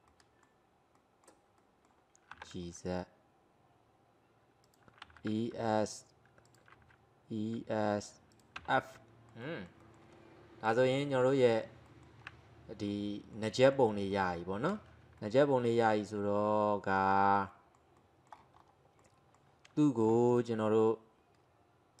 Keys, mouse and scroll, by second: 0.1-2.4 middle drag, 2.4 g, 5.1 e, 6.8 e, 8.7 f, 9.0-10.7 middle drag, 10.7-11.5 drag, 11.5 alt+middle click, 12.9-15.3 middle drag, 16.3-16.6 scroll down 1, 16.6-18.6 middle drag, 18.6 scroll up 2, 19.0-20.3 middle drag, 20.3 click, 20.7-22.0 middle drag.